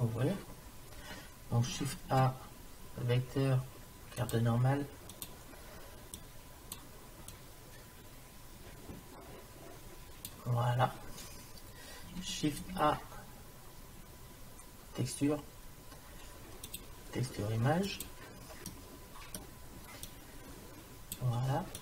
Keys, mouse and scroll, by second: 2.1 shift+a, 6.2-9.1 drag, 12.6 shift+a, 18.7-20.1 middle drag, 20.1 click.